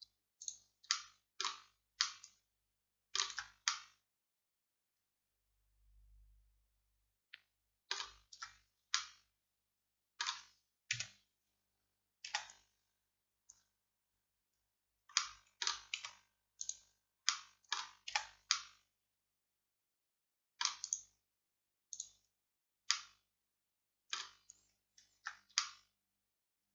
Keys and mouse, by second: 1.0-2.1 drag, 2.1-3.4 middle drag, 3.4 Tab, 8.4 Tab, 9.0 middle click, 11.0-13.5 middle drag, 11.0 KP_1, 12.3 z, 16.0 x, 18.2 z, 19.6 middle click, 19.9 middle click, 20.3 middle click, 22.6-24.6 middle drag, 25.3 Tab, 25.3 middle click.